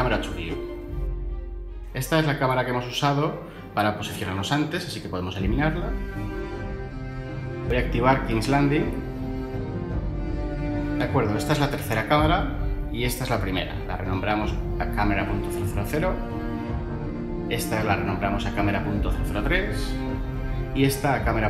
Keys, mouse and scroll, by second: 4.9 Delete, 15.9 0, 16.2 Return, 18.1 -, 18.4 0, 19.7 3, 20.3 Return.